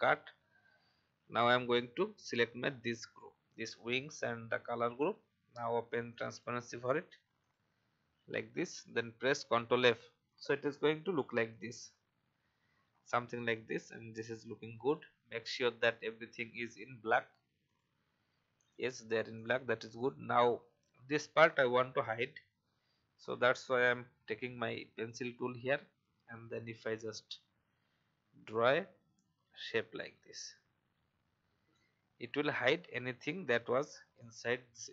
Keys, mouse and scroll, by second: 0.6 alt+scroll down 1, 1.6 click, 2.6 click, 9.5 ctrl+f, 10.8 alt+scroll up 1, 11.5 click, 12.4-12.7 alt+scroll up 1, 13.5 alt+scroll up 1, 14.8 alt+scroll down 1, 16.1 click, 24.2 n, 25.1-31.9 drag, 32.9 v, 33.3-33.8 alt+scroll down 1, 34.2 click.